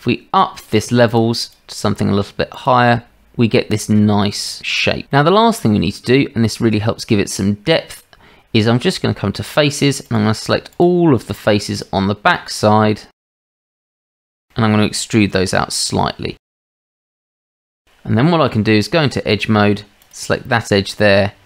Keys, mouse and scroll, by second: 1.1 click, 1.5-3.2 drag, 3.8 click, 5.1-6.1 drag, 8.7 Tab, 11.3 shift+drag, 11.8 shift+click, 13.3 shift+drag, 13.6 shift+middle click, 14.6 middle click, 15.4 e, 16.5 drag, 17.3 click, 18.5 Tab, 20.6 shift+click.